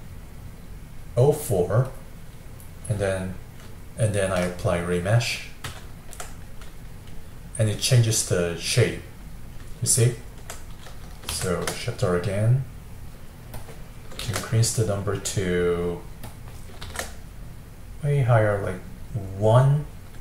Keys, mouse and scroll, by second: 3.1-5.7 middle drag, 5.7 ctrl+r, 7.0-11.4 middle drag, 11.4 shift+r, 14.3 shift+r, 16.9 shift+r.